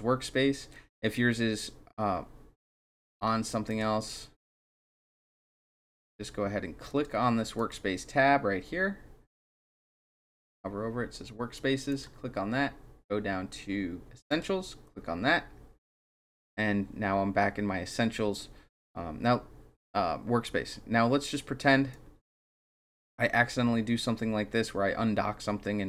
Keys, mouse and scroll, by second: 3.7 click, 6.9 click, 7.6 click, 9.3 click, 11.9 click, 14.3 click, 21.9-22.7 drag.